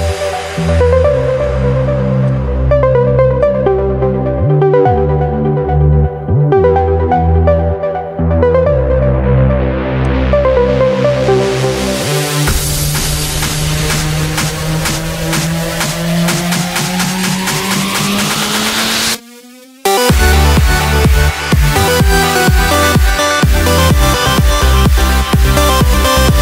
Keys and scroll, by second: 15.3 ctrl+0.